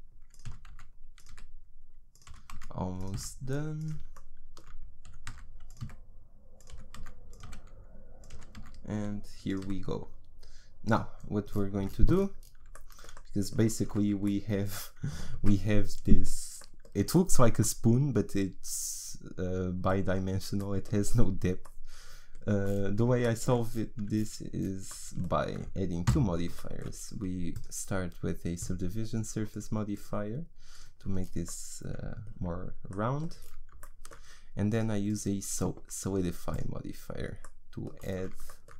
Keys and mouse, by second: 0.0-3.1 typing, 5.1 e, 5.8 s, 6.7 e, 7.5 s, 9.7 s, 11.8 Tab, 13.9 z, 26.1 n, 27.5-32.5 drag, 32.5 middle click, 34.7-37.4 drag.